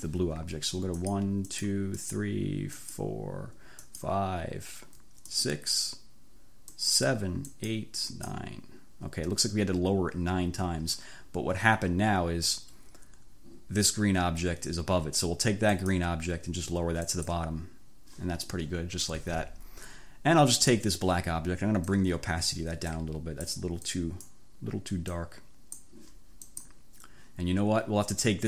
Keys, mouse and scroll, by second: 1.0 click, 1.5 click, 2.0 click, 2.9 click, 3.8 click, 5.3 click, 6.8 click, 7.5 click, 8.1 click, 15.8 click, 17.1 click, 20.5 click, 22.0 click, 23.0 click, 23.9 click, 25.1 click, 26.1 middle click, 26.5 click.